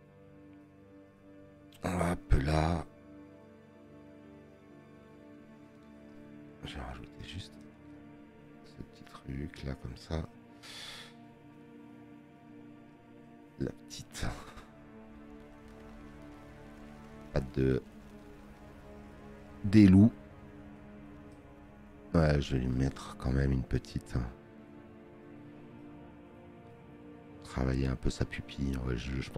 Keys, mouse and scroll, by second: 1.7 space, 1.9 click, 13.1 space, 22.7 space, 22.9 click.